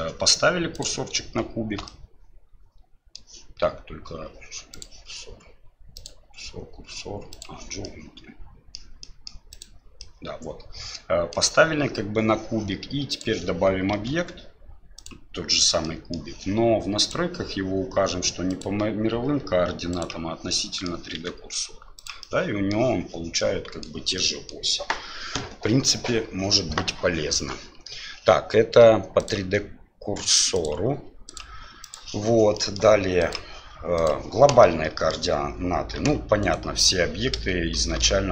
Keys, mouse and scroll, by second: 0.7 click, 1.8-3.2 middle drag, 4.8 click, 6.0-7.4 drag, 7.8-8.8 middle drag, 9.0 middle drag, 9.5 click, 10.0-11.3 middle drag, 13.1 click, 13.9 shift+a, 15.8 middle click, 17.1 click, 18.5-20.0 drag, 20.7 middle click, 21.2 s, 22.2-22.8 middle drag, 23.5 middle click, 24.3 middle click, 29.2 click, 30.5 click, 32.6 middle click, 33.3-34.4 drag, 34.7-35.1 middle drag, 36.0 Delete, 36.4 right click, 36.7 Delete, 37.8 shift+c.